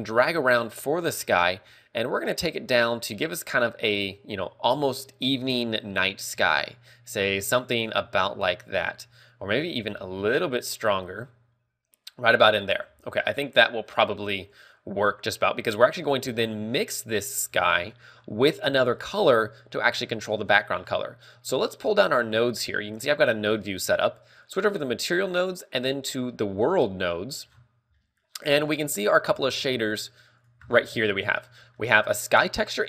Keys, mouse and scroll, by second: 10.1 click, 19.0 click, 21.6 click, 27.7 scroll down 4, 28.2 middle click, 28.2 scroll down 6, 28.5-29.3 scroll up 5, 28.9 middle click, 29.5 b, 30.1 g, 30.7 click, 30.9 scroll up 1, 31.8 middle click, 31.8 scroll up 5, 32.2 a, 32.6 click.